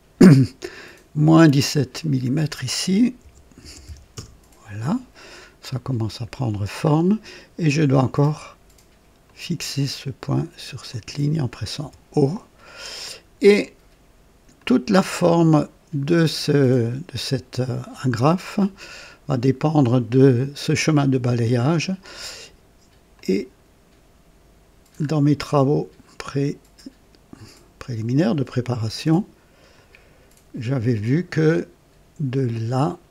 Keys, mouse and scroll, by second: 1.6 click, 3.2 KP_Subtract, 3.6 KP_1, 3.8 KP_7, 4.1 Return, 5.1-5.5 scroll down 1, 5.7-6.5 right drag, 6.8 scroll up 1, 9.2 click, 9.8 typing, 10.9 click, 11.8 typing, 12.7-13.4 right drag, 14.6-18.0 drag, 18.2-19.5 right drag, 23.1 click, 24.9-25.3 scroll up 2, 29.7 click, 31.1 right click, 32.5 click.